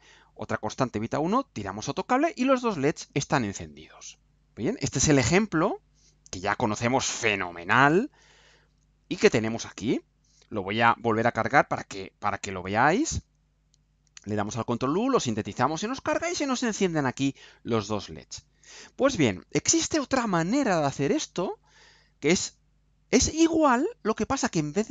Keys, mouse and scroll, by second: 6.3 click, 8.9 click, 9.9-11.1 right drag, 12.3 ctrl+u.